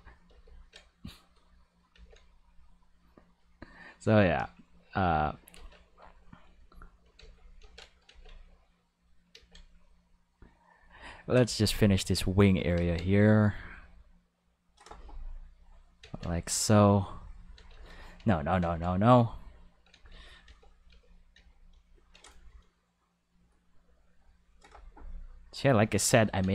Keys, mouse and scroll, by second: 0.2 ctrl+z, 1.0 click, 1.9 ctrl+z, 2.3 click, 3.2 click, 4.7 click, 5.5 ctrl+z, 6.2 click, 7.1 ctrl+z, 7.5 ctrl+z, 8.0 ctrl+z, 8.8 click, 9.3 ctrl+z, 9.7 click, 10.7-12.2 drag, 12.8 ctrl+z, 13.1 click, 13.8 click, 14.6 click, 15.4 click, 16.0 ctrl+z, 16.3 click, 16.9 click, 17.6 ctrl+z, 17.8 ctrl+z, 17.9 ctrl+z, 18.2 ctrl+z, 18.6 ctrl+z, 19.9 ctrl+z, 20.1 ctrl+z, 20.5 ctrl+z, 20.9 ctrl+z, 21.4 ctrl+z, 21.7 ctrl+z, 23.1 click, 24.3 click, 25.5 click, 26.2 ctrl+z.